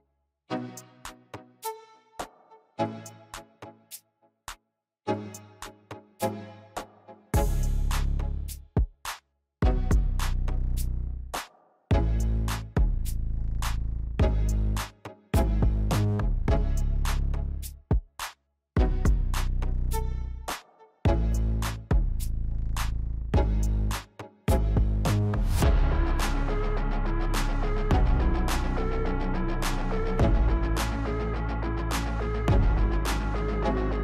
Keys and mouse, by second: 1.5-2.5 middle drag, 3.2 KP_1, 4.8-6.9 shift+middle drag, 7.4 click, 8.4 s, 11.3 click, 12.8 Delete, 16.1 click, 17.7 click, 19.3 click, 20.2 click, 20.9-24.0 drag, 24.5 click, 27.1 shift+a.